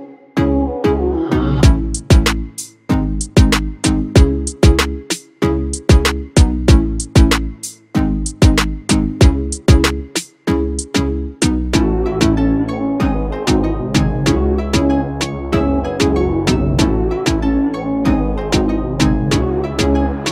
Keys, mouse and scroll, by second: 8.2 alt+shift+click, 11.1 ctrl+z.